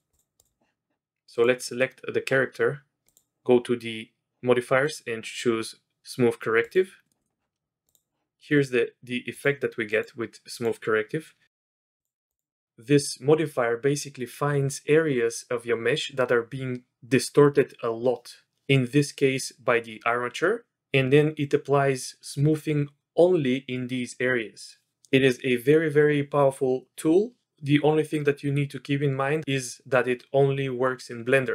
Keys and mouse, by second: 0.0 click, 0.4 click, 1.7 click, 3.0 click, 4.8-6.8 drag, 7.1 click, 7.2 click, 7.8 click, 8.5 click, 9.3 click, 9.9 click, 10.5 click, 11.9 click, 12.3 click.